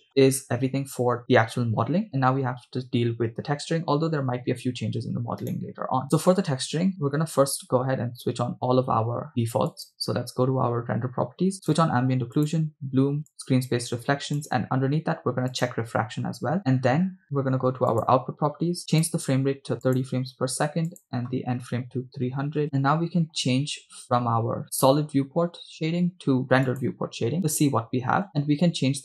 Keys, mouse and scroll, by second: 5.5 right click, 9.7 click, 11.7 click, 12.5-12.8 drag, 13.4 click, 14.4 click, 15.6-16.8 drag, 18.0 click, 19.0-20.1 drag, 20.9-22.6 drag, 22.6 0, 27.0 click.